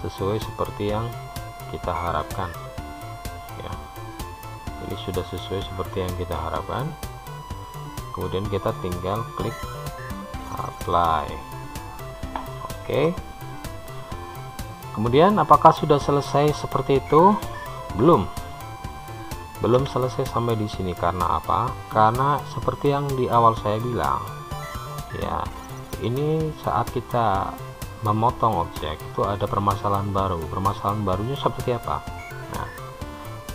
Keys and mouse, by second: 1.4 click, 2.0-8.9 middle drag, 10.6-13.8 drag, 13.8-17.6 middle drag, 20.1 Tab, 21.2-30.5 middle drag, 31.2 click.